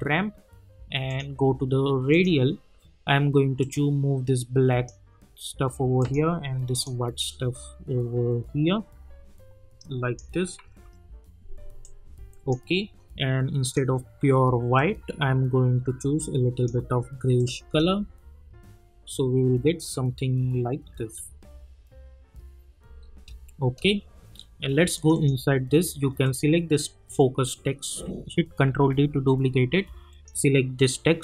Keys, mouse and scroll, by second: 10.8 typing, 11.8-17.4 drag, 17.6 space, 22.8 space, 24.9 click, 28.6 ctrl+d, 30.1 click.